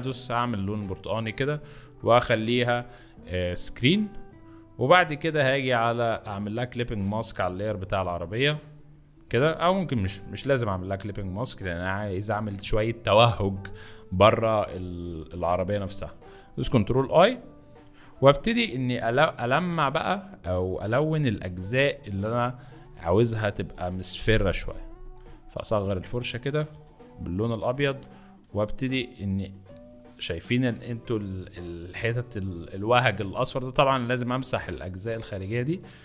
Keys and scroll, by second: 16.7 ctrl+i, 18.2 [, 19.5 [, 19.7 [, 20.6 b, 24.4 [, 25.7 ], 27.7 ctrl+z.